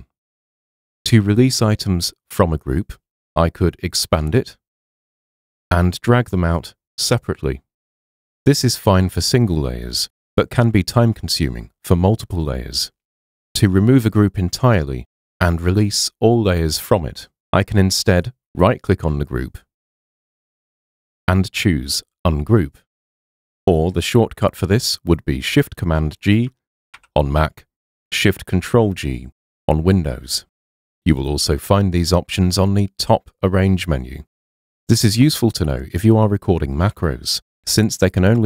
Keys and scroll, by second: 27.0 shift+super+g.